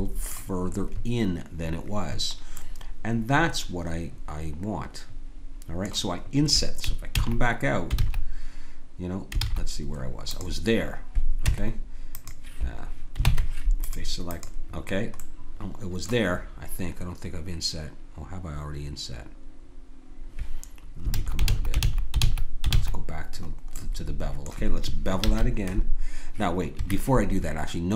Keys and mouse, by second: 3.0 middle click, 7.1 ctrl+z, 7.9 ctrl+z, 9.4 ctrl+z, 10.3-12.6 drag, 11.5 Tab, 13.2 ctrl+Tab, 14.3 click, 15.2 click, 21.1 ctrl+z, 21.4 ctrl+z, 21.8 ctrl+z, 22.2 ctrl+z, 22.7 ctrl+z, 23.8 middle click, 25.2 ctrl+b.